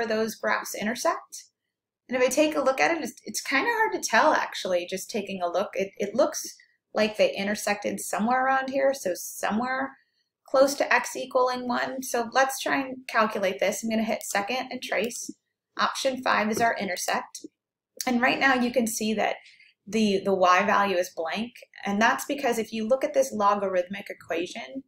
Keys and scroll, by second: 17.0 5.